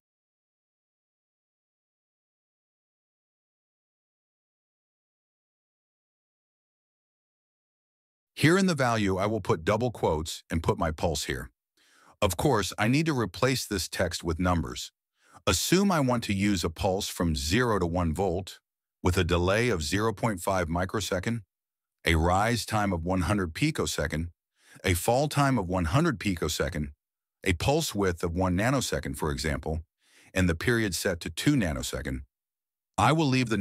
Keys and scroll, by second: 8.9-9.6 typing, 10.7 Left, 11.6 ctrl+v, 16.0-18.0 typing, 17.0 Right, 17.1 Right, 17.2 Right, 19.1 Right, 19.4 Right, 19.8-21.7 typing, 22.0 Right, 22.2 Right, 22.4 Right, 22.9-24.4 typing, 24.8 Right, 24.9 Right, 25.1 Right, 25.5-27.2 typing, 27.8 Right, 27.9 Right, 28.0 Right, 28.4-29.2 typing, 29.8 Right, 30.1 Right, 30.2 Right, 30.3 Right, 30.7-33.3 typing, 32.3 Right, 32.4 Right, 32.5 Right.